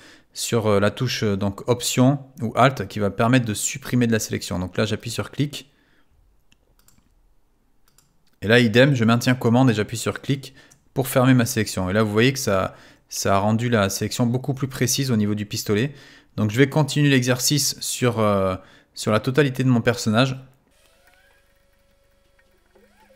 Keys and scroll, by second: 20.8 w.